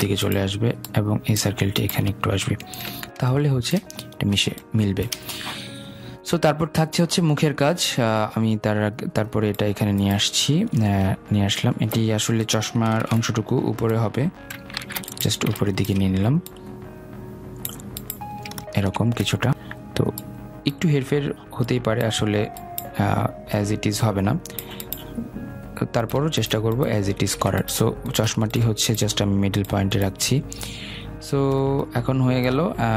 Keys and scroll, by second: 12.9 ctrl+z, 14.6 ctrl+shift+], 27.5 ctrl+z.